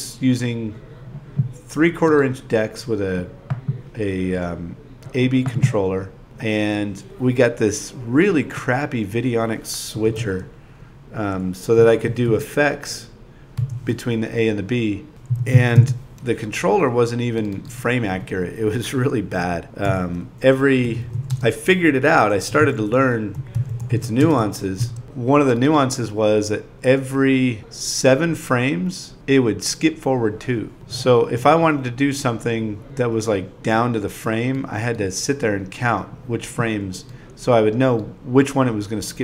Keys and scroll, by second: 0.0-4.9 typing, 12.0 2, 13.7 8, 15.4 2, 16.3 ,, 16.8 super+v, 18.4 shift+p, 19.0 2, 20.7 ,, 22.0 0, 22.9 |, 24.7-26.3 typing, 27.3 4, 28.7 ,, 29.7 super+v, 31.4 0, 32.7 space, 33.0 space, 33.2 ,, 35.0 0, 35.3 ., 36.1 Return, 38.2-39.2 typing.